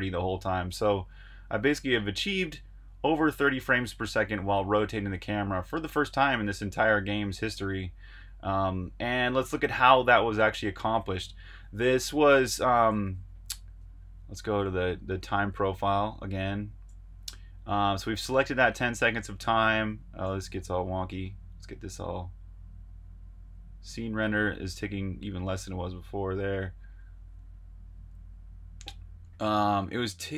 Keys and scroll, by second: 0.9-2.7 typing, 3.8-4.6 typing, 11.0 super+q, 13.0 super+Tab, 14.5 super+Tab.